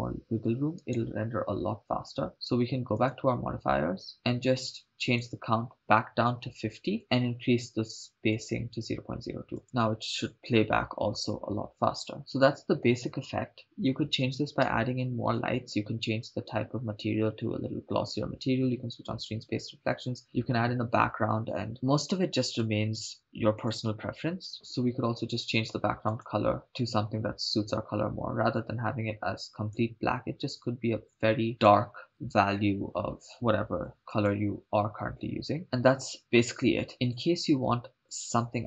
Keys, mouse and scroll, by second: 1.2 right click, 4.1 click, 5.0-7.0 drag, 8.3-9.6 drag, 9.6 shift+space, 15.0 shift+space, 22.5-23.7 drag, 26.1 click, 32.7 BackSpace, 32.8 BackSpace, 35.6 shift+space, 37.3 click.